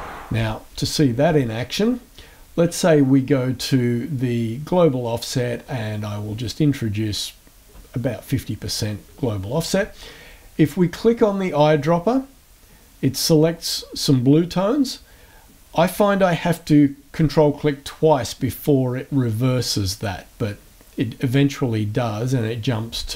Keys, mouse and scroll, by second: 5.6 click, 11.8 click, 18.4 ctrl+click, 19.4 ctrl+click.